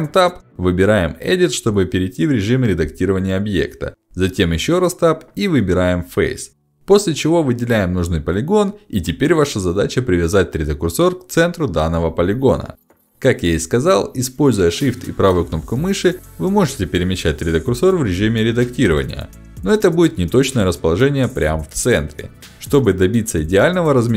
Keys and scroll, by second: 2.6 Escape.